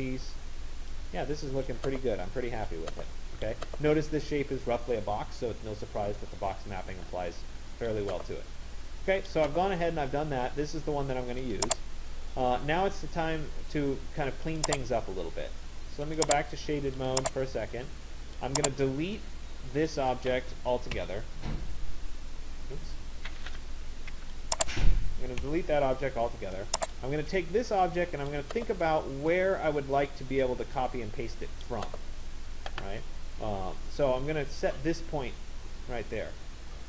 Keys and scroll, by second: 20.7 Delete.